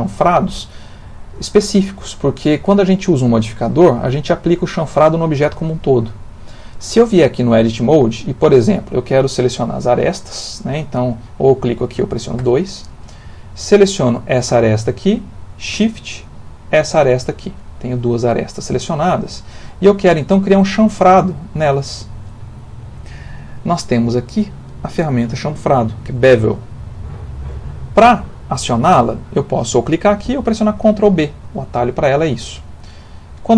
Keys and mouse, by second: 0.8 middle click, 1.4 ctrl+middle click, 7.8 click, 9.8 click, 12.4 2, 13.9 click, 16.5 shift+click, 32.3 ctrl+b.